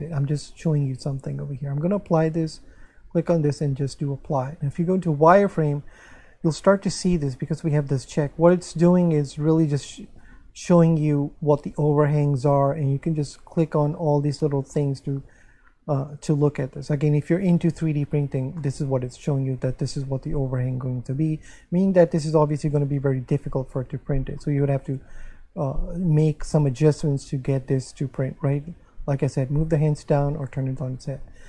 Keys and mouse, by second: 1.0 click, 2.8 click, 4.7 Tab, 5.5 middle click, 6.5 shift+middle click, 8.5 shift+middle click, 9.5 click, 12.8 click, 15.1 click, 18.6 middle click, 21.3 1, 24.4 shift+middle click, 27.0 shift+middle click.